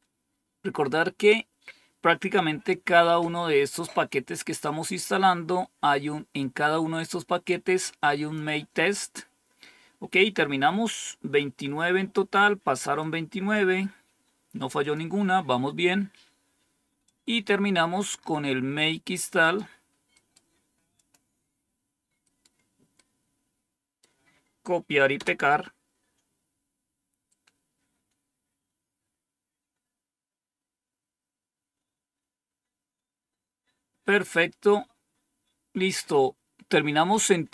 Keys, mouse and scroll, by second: 6.9-8.3 drag, 12.9 click, 14.7 click, 16.9-19.5 drag, 20.8 click, 25.0 Return.